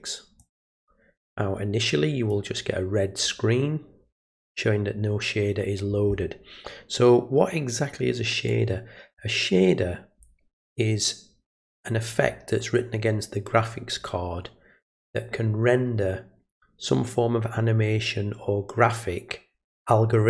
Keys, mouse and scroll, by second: 0.4-2.3 drag, 8.5 click.